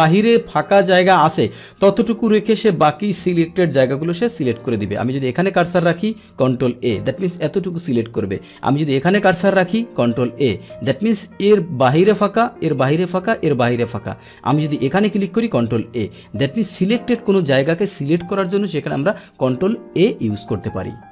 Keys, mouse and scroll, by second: 3.0-4.6 drag, 5.2 click, 6.3 ctrl+a, 7.8-8.7 scroll down 1, 8.7 click, 10.1 ctrl+a, 14.7 click, 15.5 ctrl+a, 16.4-21.1 middle drag.